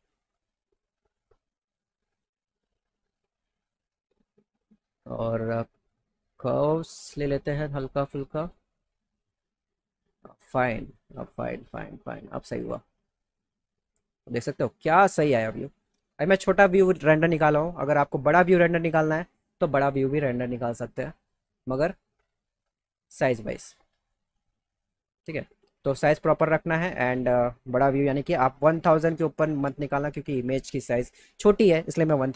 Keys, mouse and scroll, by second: 0.0 click, 1.3 click, 2.6 click, 3.5 click, 5.5 click, 5.8 click, 7.2 click, 8.4 click, 9.2-11.0 drag, 11.6 click, 12.6-13.6 drag, 14.4 middle click, 20.7 click, 26.3 click, 27.0 click.